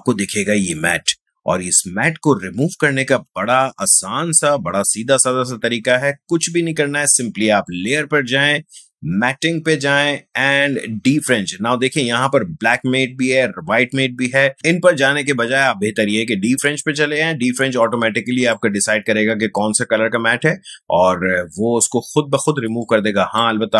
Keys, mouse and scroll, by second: 7.7 click, 17.8-21.1 drag, 22.8-23.7 drag.